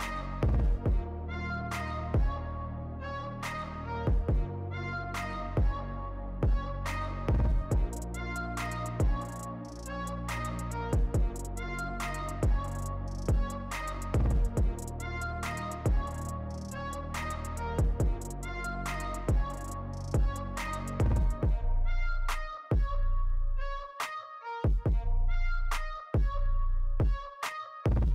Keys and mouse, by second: 0.0 right click, 1.8 right click, 2.5 right click, 3.8 right click, 4.1 right click, 12.5 right click, 13.9 right click.